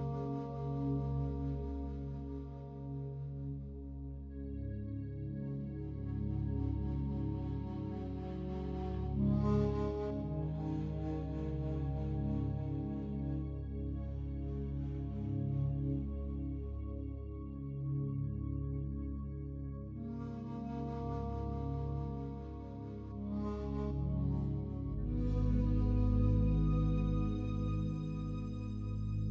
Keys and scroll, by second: 26.6 ctrl+z.